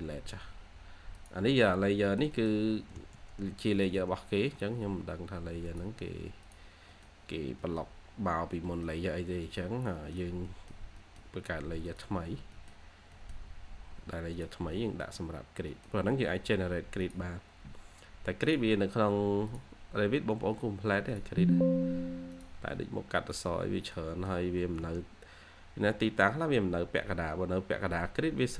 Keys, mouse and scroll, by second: 2.0 middle click, 2.7 typing, 4.2 scroll, 4.2 scroll down 1, 4.5-5.5 typing, 4.7-5.5 scroll up 2, 6.8 middle click, 7.2 scroll up 1, 7.5 middle click, 7.7-8.6 scroll down 1, 8.6 middle click, 9.8 middle click, 10.0-10.4 scroll up 1, 10.4 middle click, 12.1 scroll down 1, 12.3 scroll up 1, 12.4 middle click, 12.9 scroll up 1, 13.0 middle click, 13.3 scroll down 1, 13.5 scroll up 1, 14.6 middle click, 14.9-15.3 scroll down 1, 15.6 middle click, 16.1-17.1 scroll up 1, 23.7 middle click, 24.5 2, 26.2 scroll up 1, 26.5 2, 26.8-27.2 scroll up 1, 27.2 2, 28.0-28.3 scroll down 1, 28.3-28.5 scroll.